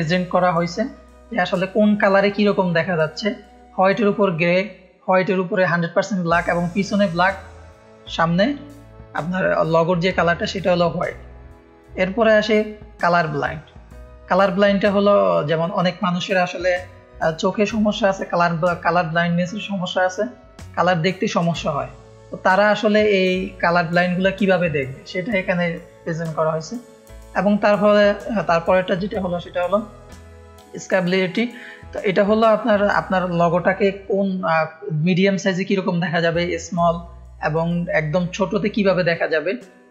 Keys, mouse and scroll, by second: 11.0 middle click, 11.5 middle click, 13.3 click, 14.3 middle click, 15.3 click, 26.2 middle click, 26.2-27.1 scroll down 3, 27.5-27.9 scroll down 1, 32.8 scroll down 1.